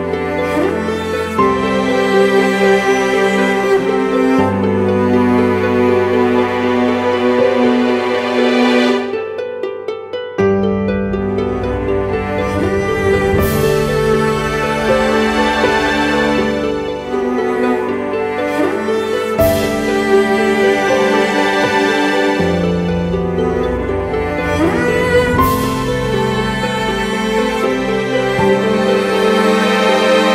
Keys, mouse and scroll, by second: 3.1 alt+shift+click, 5.8 alt+shift+click, 18.6 Return, 24.9 right click.